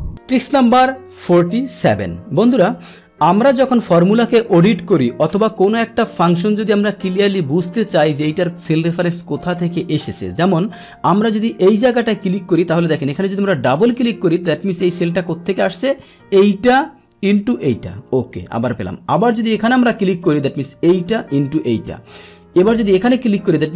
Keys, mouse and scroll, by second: 11.4 click, 12.1 click, 13.7 click, 18.3 Return, 19.6 click, 21.9 Return, 23.1 click.